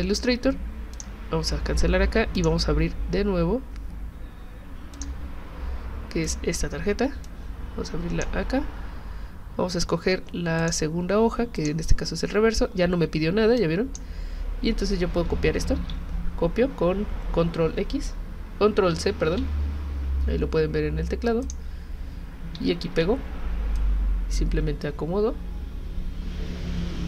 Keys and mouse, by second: 0.9 click, 2.3 click, 4.9 click, 6.2 click, 7.3-8.2 drag, 10.6 click, 11.6 click, 13.6 click, 15.8 ctrl+c, 19.3 ctrl+c, 21.4 click, 22.8 ctrl+v, 23.8-27.0 drag.